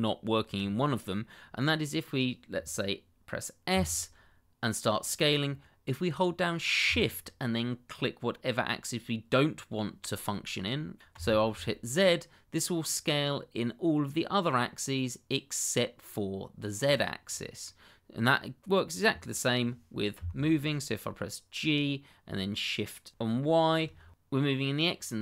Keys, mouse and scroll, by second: 3.7 s, 11.1 shift+z, 16.8 click, 17.2 scroll down 1, 17.6 middle click, 20.1 g, 23.6 shift+y.